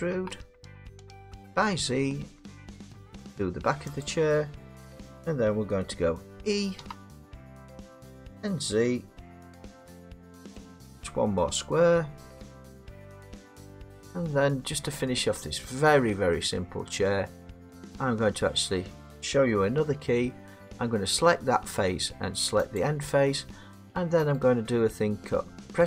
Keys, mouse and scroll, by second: 0.1 e, 1.4 z, 4.0 click, 6.8 e, 9.4 z, 13.4 click, 14.4 middle click, 14.7-15.6 middle click, 14.8 middle click, 15.2 scroll, 15.6 middle click, 15.8 middle click, 15.8 middle click, 15.9 middle click, 16.1 middle click, 16.5 middle click, 17.7 click, 21.2 middle click, 22.8 shift+click, 24.3 right click.